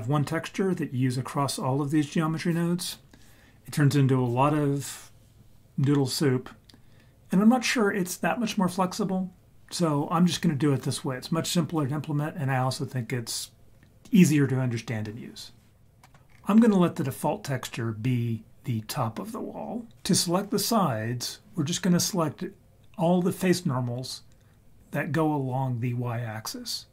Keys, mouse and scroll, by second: 16.0 middle click, 16.3-18.5 scroll up 3.